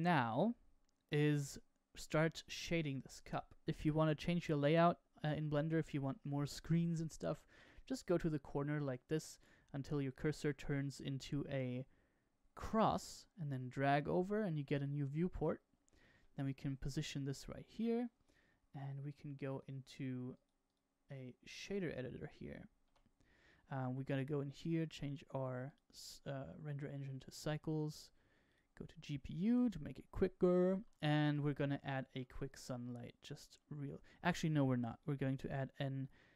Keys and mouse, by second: 5.1 n, 12.7-14.8 drag, 16.1-16.6 shift+middle drag, 16.8-17.7 middle drag, 19.4-20.4 drag, 20.6-21.6 drag, 22.8 n, 24.6-25.7 drag, 27.6-28.5 drag, 29.5-29.9 middle drag, 31.0 shift+middle drag, 31.9 shift+a, 34.8-36.3 drag.